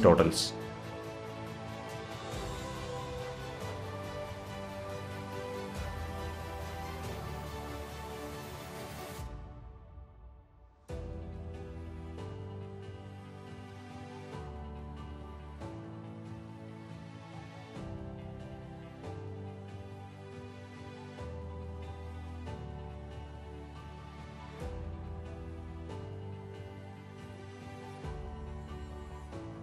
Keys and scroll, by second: 4.2 alt+=, 8.7 alt+=.